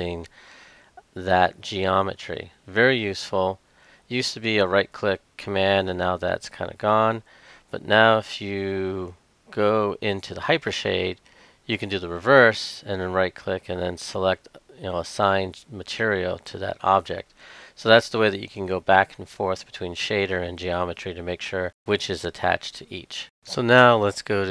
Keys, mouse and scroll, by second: 1.1 shift+click, 3.6 click, 4.6-9.5 right drag, 9.8 click, 11.3-13.6 right drag, 15.6-24.5 drag.